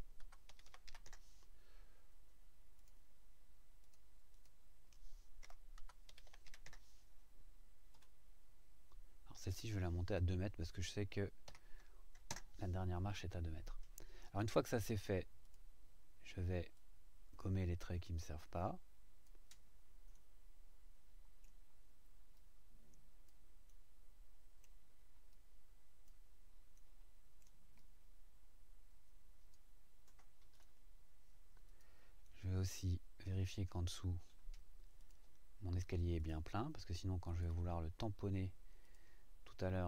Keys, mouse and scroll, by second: 0.0-0.8 typing, 1.0 KP_Enter, 2.8 click, 3.8 click, 4.3 click, 5.4-6.5 typing, 6.6 KP_Enter, 7.9 click, 11.5 KP_2, 12.3 KP_Enter, 15.4 click, 16.7-19.4 drag, 20.1-21.6 middle drag, 22.3 click, 23.7 middle click, 24.0 right click, 24.6 middle click, 25.3 click, 26.7 middle click, 26.9-27.6 right drag, 27.8-29.7 drag, 30.5 click, 31.7 click, 32.2 middle click, 32.4-33.7 right drag, 35.0 click, 36.2 click, 37.3 click, 38.8 click.